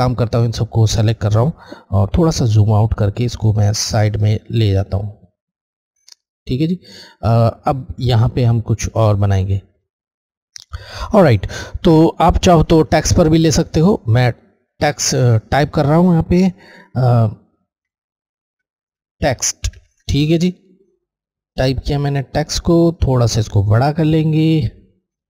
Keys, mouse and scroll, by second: 0.4 click, 2.1 scroll, 2.3 scroll down 1, 4.7 click, 7.7-8.3 scroll, 8.1-8.9 scroll up 2, 8.9 click, 9.4 space, 12.8 click, 17.8-19.7 typing, 21.8 click, 23.2-25.2 shift+drag.